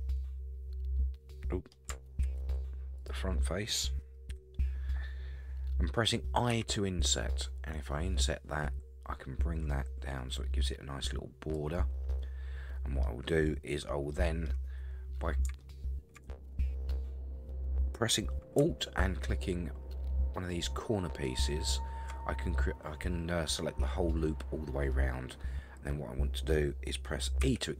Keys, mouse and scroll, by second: 2.2 alt+z, 3.0 click, 4.3 KP_1, 6.5 i, 12.1 middle click, 14.1 middle click, 14.8 scroll up 3, 15.6 shift+middle click, 21.2 alt+click, 24.9-26.6 middle drag, 27.4 e.